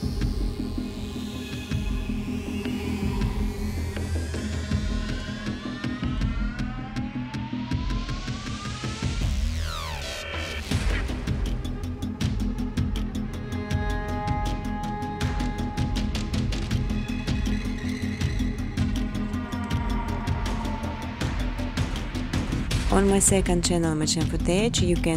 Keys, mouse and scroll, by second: 1.1 click, 3.3 click, 4.5 click, 5.3-6.5 typing, 7.4 click, 7.6 click, 9.6 click, 10.1 Tab, 10.5 Tab, 10.8-11.5 typing, 14.4-15.1 typing, 16.1 click, 16.5 click, 16.7 click, 19.1 click, 20.1-21.4 typing, 23.2-24.5 typing, 24.0 click.